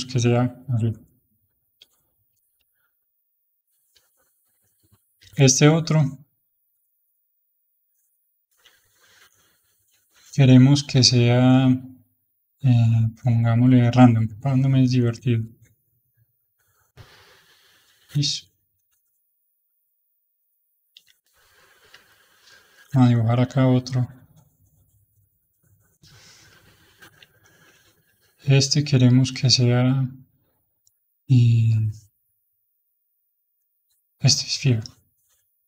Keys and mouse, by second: 3.2 h, 3.9-5.1 middle drag, 5.1 h, 5.8 h, 7.6 click, 8.4 h, 9.7-13.9 drag, 15.1 click, 16.7-19.7 middle drag, 20.1 click, 20.8 h, 21.2-24.0 middle drag, 24.0-27.0 drag, 27.0 h, 27.3-29.0 middle drag, 29.0-32.9 drag, 33.4-35.6 drag.